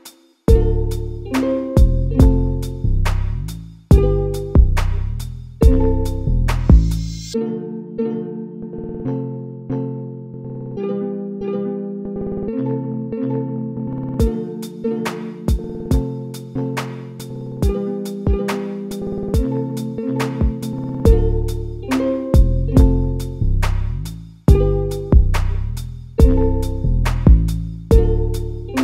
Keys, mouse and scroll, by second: 0.1 middle click, 1.0-1.9 scroll up 2, 1.9 3, 2.2 click, 3.9 2, 4.0 click, 4.7 g, 6.5 g, 7.7 click, 8.2 g, 9.6 KP_0, 10.4-10.7 scroll up 1, 10.7 g, 12.0 click, 12.7 3, 12.8 click, 13.2 g, 14.6 2, 14.7 click, 15.0 g, 16.0 click, 16.5 click, 16.9 click, 17.4 g, 18.1 scroll down 2, 18.4 middle click, 19.0-19.6 scroll up 1, 19.6 2, 19.7 click, 20.6 KP_1, 21.0 KP_0, 21.8-22.2 scroll up 2, 22.2 g, 23.2 1, 23.3 click, 23.7 g, 25.4 click, 25.7 g, 26.5-27.0 scroll down 1, 27.0 2, 27.6 click, 28.5 g.